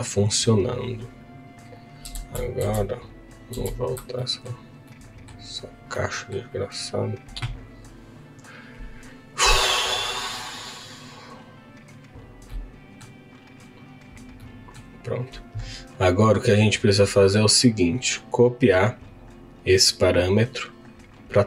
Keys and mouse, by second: 2.7 ctrl+z, 12.5 middle click, 14.4 middle click, 17.7 click, 18.5-20.4 drag.